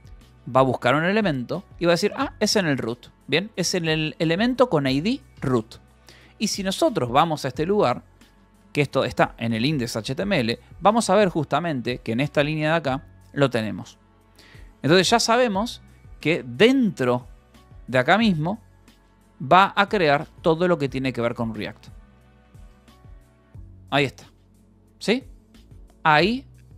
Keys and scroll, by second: 0.0-3.4 typing, 5.4 Escape, 8.2-9.4 typing, 10.0 Return, 11.3 9, 11.6 j, 12.7 shift+v, 14.7 Escape, 17.2 e, 18.5-22.1 typing, 19.0 Return, 26.7 j.